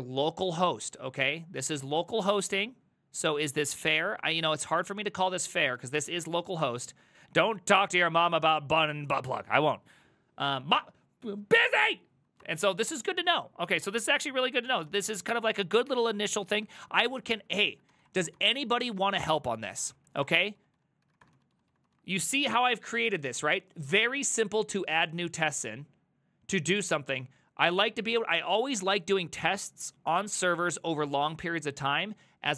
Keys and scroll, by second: 1.7 ctrl+a, 1.9 [, 2.0 ctrl+u, 4.3 shift+a, 12.5 alt+{, 13.7 Up, 14.7 ctrl+c, 14.8 ctrl+c, 14.9 ctrl+a, 15.1 3, 16.5 ctrl+a, 16.7 1, 17.6 ctrl+c, 17.7-22.2 typing.